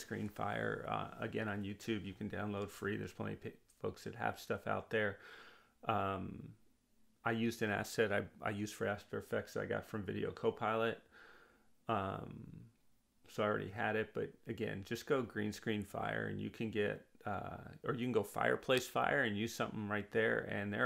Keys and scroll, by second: 9.8 w.